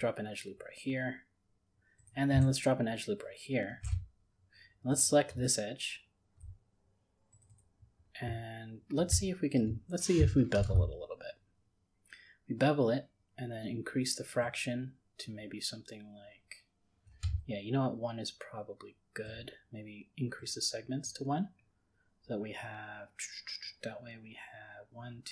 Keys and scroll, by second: 10.6 ctrl+b.